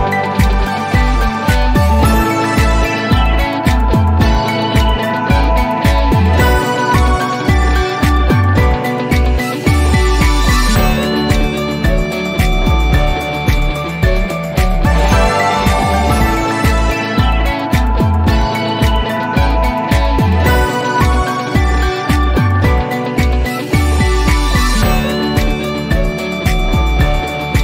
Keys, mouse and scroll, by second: 23.6 click, 25.3-26.3 drag.